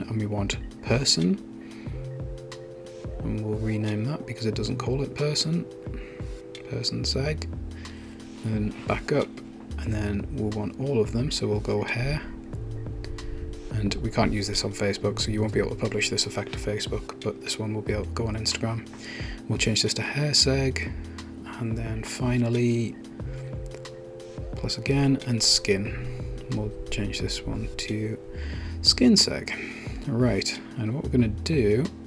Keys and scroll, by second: 4.3 Return, 4.8-7.2 typing, 18.5 Return, 19.1-21.1 typing, 28.9 Return, 29.1-31.0 typing.